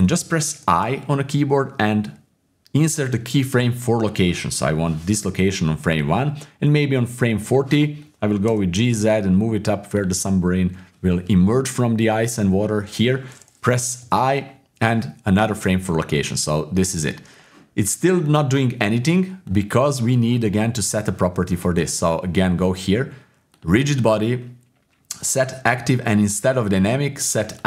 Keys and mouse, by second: 0.7 i, 6.0-7.5 drag, 8.5 g, 10.2 click, 14.0 i, 16.2-17.3 drag, 19.4 click, 23.5 click, 26.7 click.